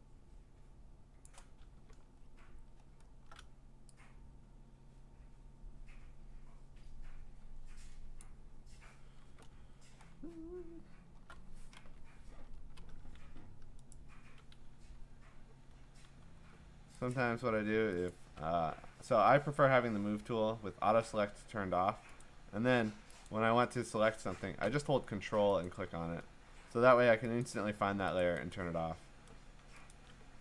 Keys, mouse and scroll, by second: 1.2 click, 1.9-3.3 ctrl+scroll, 8.2 click, 9.6-10.4 scroll, 11.1 scroll, 12.6 Return, 13.9 right click, 14.7 Escape, 16.2 v, 17.1 ctrl+click, 18.1 ctrl+click, 21.8 ctrl+click, 22.2 ctrl+click, 23.3 ctrl+click, 25.7 ctrl+click, 27.4 click, 28.2 click, 28.5 click, 29.9 shift+click.